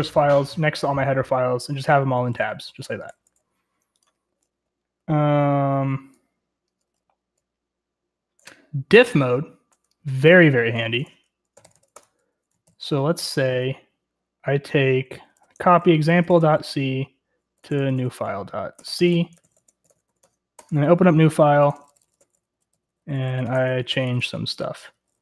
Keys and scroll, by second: 1.7-5.0 typing, 6.9-7.2 typing, 10.8-12.2 typing, 12.6 ctrl+l, 15.1-23.9 typing.